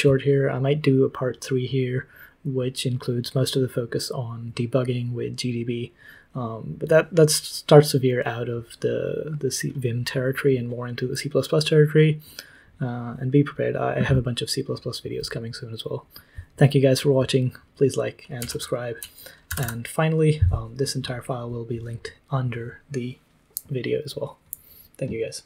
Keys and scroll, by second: 18.4 super+l, 19.4 typing.